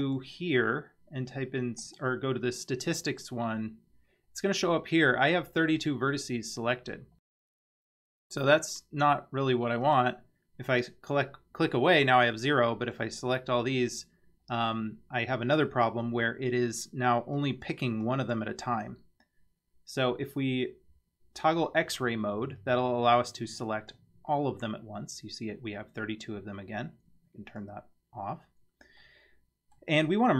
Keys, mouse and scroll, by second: 0.0-4.1 drag, 7.0-7.3 scroll down 1, 9.9 click, 12.5-13.0 drag, 17.4-17.7 drag, 18.0-18.3 drag, 21.6 click, 23.2-23.9 drag, 27.5 click, 29.0 middle click.